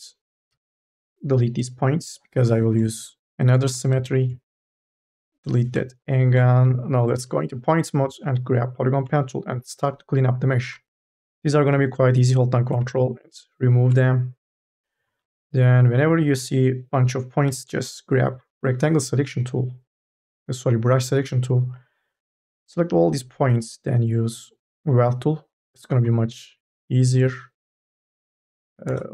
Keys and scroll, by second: 0.3 Delete, 3.6 3, 3.8 e, 5.0 Delete, 6.4 1, 17.3 9, 18.1 KP_0, 26.5 space, 28.7 space.